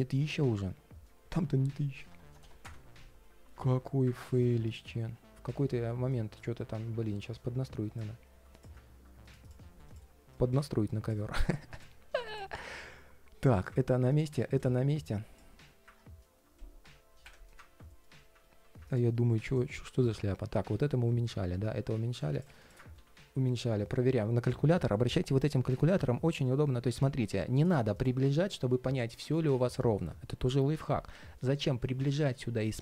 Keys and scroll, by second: 19.2 alt+h, 20.4 super+z, 22.7 super+z.